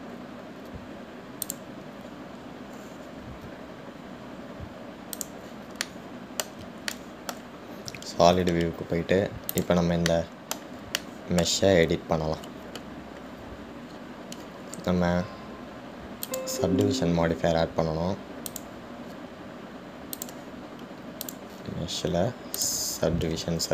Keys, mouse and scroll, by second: 3.3-3.7 scroll up 2, 6.4 click, 7.1-9.1 middle drag, 9.1 g, 11.3-15.1 middle drag, 15.1-16.1 scroll up 2, 16.1-17.0 scroll up 1, 17.0-18.2 scroll up 1, 21.4 click.